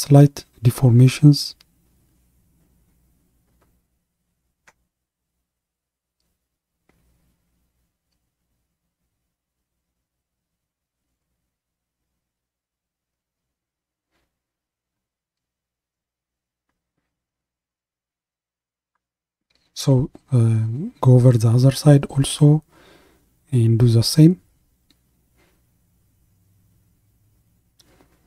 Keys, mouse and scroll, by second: 17.3-23.8 middle drag, 23.8-28.2 drag.